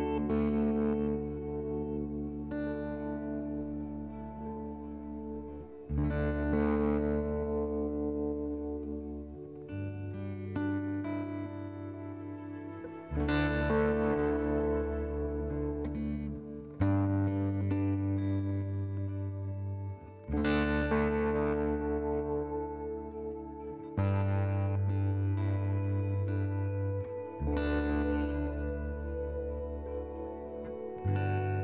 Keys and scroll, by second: 1.8 4, 2.0 Return, 4.1 F3, 4.4 m, 11.9 c, 12.5 F10, 14.3-16.4 typing, 20.4 6, 20.5 Return, 30.6 c.